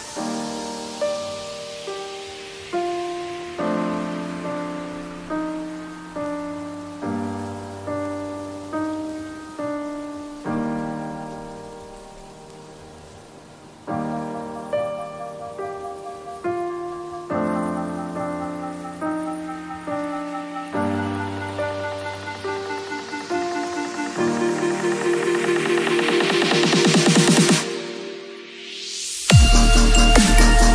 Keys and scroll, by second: 3.2 b, 8.4 v, 8.8 space, 9.1 ctrl+a, 9.4 ctrl+c, 9.7 ctrl+w, 10.6 ctrl+v, 10.9 ctrl+t, 21.1 space, 29.2 ctrl+t.